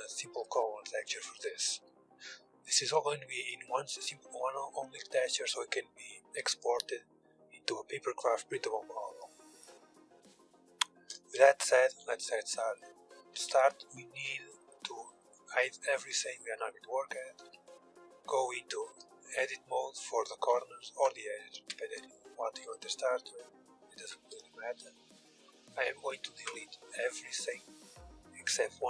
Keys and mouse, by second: 1.4 KP_1, 2.3-7.3 middle drag, 9.6-11.6 drag, 10.9 KP_1, 12.9 Tab, 13.7 Tab, 15.0 h, 15.6 h, 16.1 h, 17.0 Tab, 19.0-20.5 middle drag, 20.0-22.8 typing, 21.5-22.8 middle drag, 24.3 b, 24.9 x.